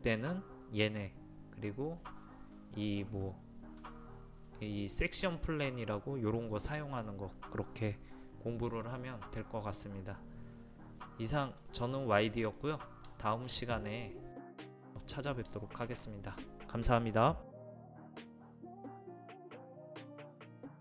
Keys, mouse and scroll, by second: 12.6 scroll down 1, 13.1 shift+middle click, 14.2-15.5 scroll down 1, 15.5 shift+middle click.